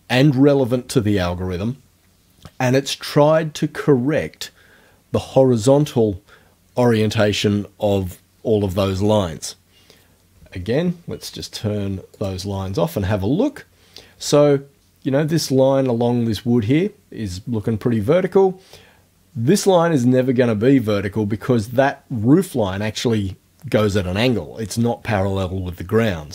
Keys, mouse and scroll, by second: 12.2 click.